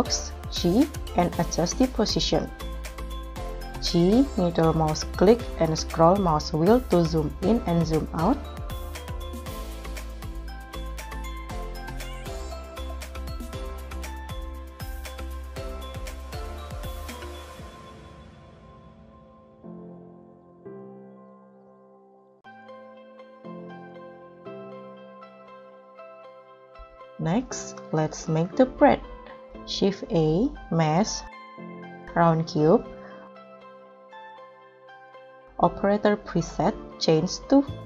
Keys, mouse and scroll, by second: 0.4 g, 3.4 g, 3.8 middle click, 6.9 g, 9.2 scroll up 3, 9.5 scroll down 1, 9.7 scroll up 1, 11.7 s, 15.0 KP_Decimal, 15.6 KP_3, 17.1 alt+z, 18.8 g, 22.0 alt+z, 22.5 KP_0, 23.6 ctrl+s, 26.9-27.3 scroll down 3, 27.1 middle click, 27.4 scroll up 2, 28.1-28.6 scroll up 2, 29.8 scroll up 1, 30.4 shift+a.